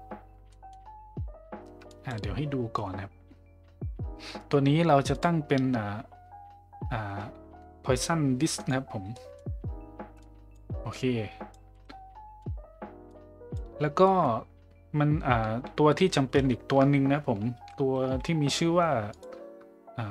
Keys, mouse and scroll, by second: 0.5 middle drag, 1.9 drag, 5.1-8.7 drag, 9.2 middle click, 10.2 click, 11.0 click, 11.7 middle click, 13.1 click, 14.1 middle click, 17.6 shift+a.